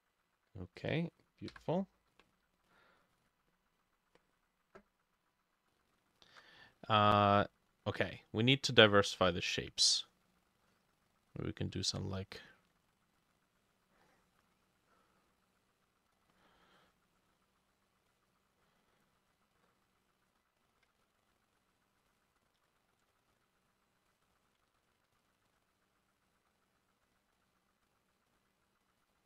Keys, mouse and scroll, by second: 1.5 Insert, 6.3 ctrl+click, 7.6 shift+click, 21.1 ctrl+click, 22.6 ctrl+z, 23.1 shift+click, 24.7 ctrl+z, 25.1 ctrl+z, 25.4 shift+click, 27.1 double click, 27.9-29.2 drag.